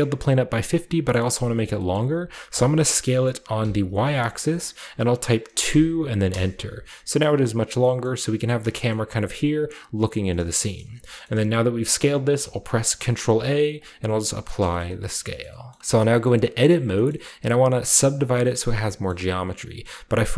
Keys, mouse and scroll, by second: 0.6 click, 1.2-3.6 middle drag, 2.5 s, 3.6 y, 5.6-6.5 typing, 6.3 Return, 7.0 scroll down 1, 7.7-11.6 middle drag, 8.0 scroll up 1, 8.6-9.6 shift+scroll up 2, 8.6 typing, 10.2-11.6 scroll down 3, 12.4 ctrl+a, 13.8 click, 14.6 shift+middle click, 15.8 ctrl+b, 16.6 scroll up 1, 17.1 scroll down 1, 17.1-18.6 shift+middle drag, 17.1 shift+scroll up 1, 18.8-20.3 shift+middle drag.